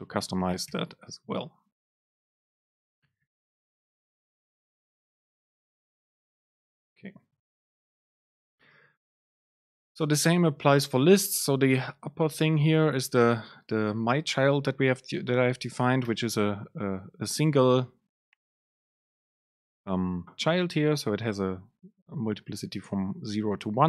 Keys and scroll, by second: 0.0 BackSpace, 6.5 ctrl+shift+super+F9, 9.5 super+space, 11.5 Up, 12.5 super+space.